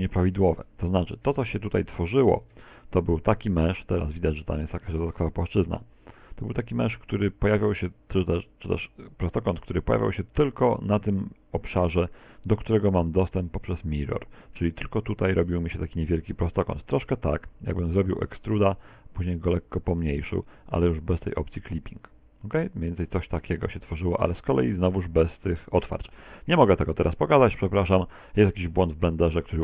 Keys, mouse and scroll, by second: 1.9 Tab, 2.8 right click, 3.6 shift+right click, 4.5 shift+right click, 5.2 shift+right click, 5.6 z, 6.0 middle click, 9.3 middle click, 16.4 click, 17.2 middle click, 20.7 e, 21.3 click, 21.9 s, 24.2 click, 24.5 s, 25.8 click, 26.0 z, 26.4 middle click.